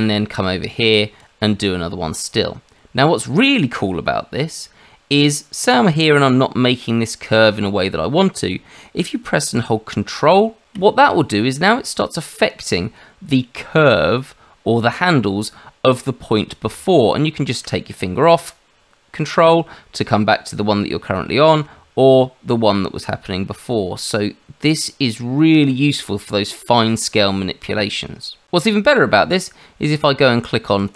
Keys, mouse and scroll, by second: 1.2 click, 30.7 click.